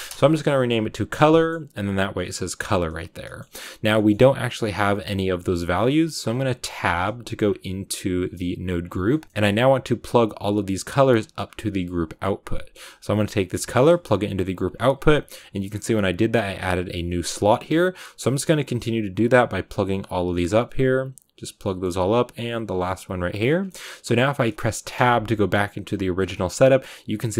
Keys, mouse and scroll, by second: 0.0 click, 8.5 click, 9.5-14.6 drag, 14.9 scroll up 1, 17.0-18.6 drag, 19.3 click, 20.7 click, 21.6 middle click, 22.4 click, 23.6-27.3 middle drag.